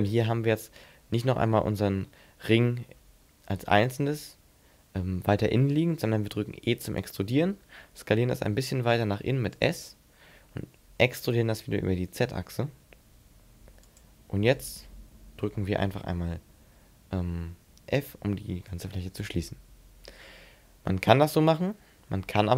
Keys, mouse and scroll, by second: 3.8 ctrl+z, 6.5 e, 7.0 right click, 7.5 s, 9.7 click, 11.1 e, 14.0 click, 18.7 f, 22.4 ctrl+z.